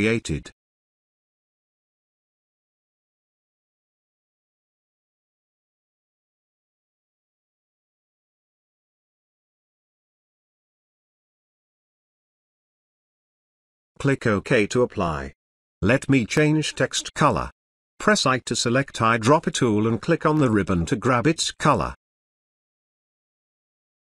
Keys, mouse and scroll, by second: 2.5-3.1 click, 3.2 ctrl+z, 3.4 drag, 6.0-6.8 drag, 11.1-13.6 drag, 16.0 space, 16.3-16.9 ctrl+click, 17.3 space, 17.5 click, 17.5 ctrl+click, 17.7 Return, 17.8 click, 18.0 click.